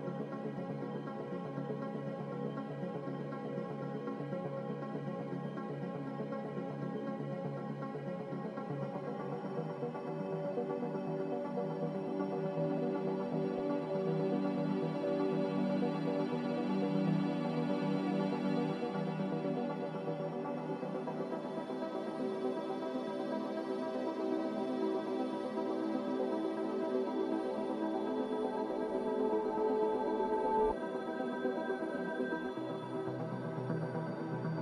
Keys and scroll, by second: 0.3 a, 5.0 b, 8.6 a, 10.5 z, 12.2 typing, 13.4-14.1 typing, 17.3 typing, 21.1 x, 22.7 z, 24.1 typing, 30.9 f.